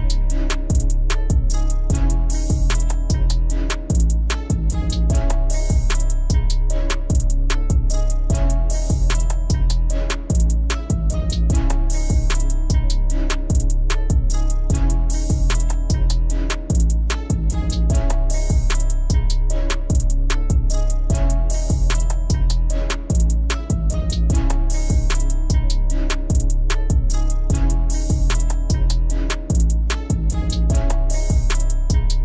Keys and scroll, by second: 1.7 alt+c.